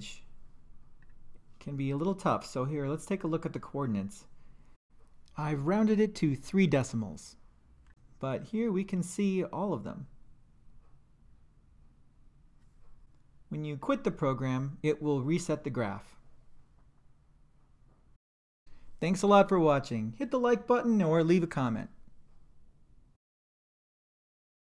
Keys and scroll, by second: 1.0 Return, 13.8 5.